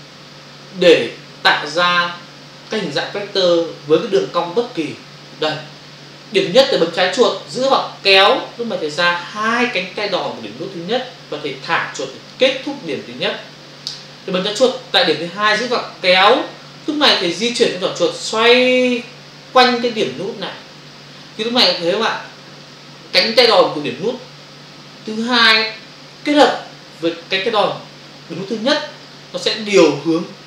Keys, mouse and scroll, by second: 7.6 click, 15.6 click.